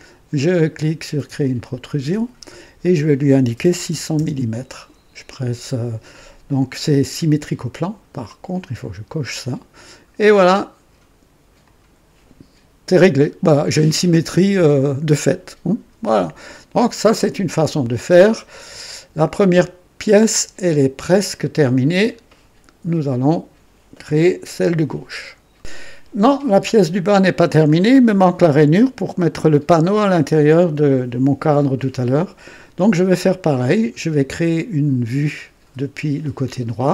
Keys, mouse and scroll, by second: 1.4 click, 3.5 KP_6, 3.8 KP_0, 4.1 KP_0, 8.7 click, 11.6 click, 13.8-18.8 drag, 19.2 scroll down 1, 19.9-20.8 right drag, 21.4 right click, 25.5 click, 27.6-28.4 drag, 33.2-33.9 drag.